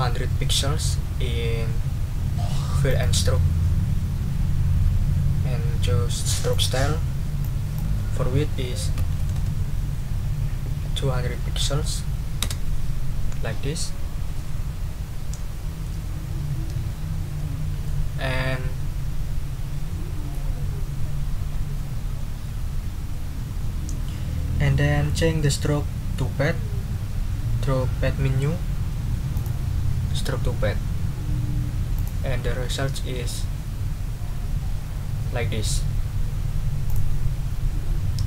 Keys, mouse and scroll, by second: 2.9 click, 6.5 click, 7.4 click, 8.7-9.7 typing, 12.4 Return, 17.8 middle click, 18.1-20.2 scroll up 2, 20.2 scroll up 1, 29.3 click, 31.9 click, 36.9 click.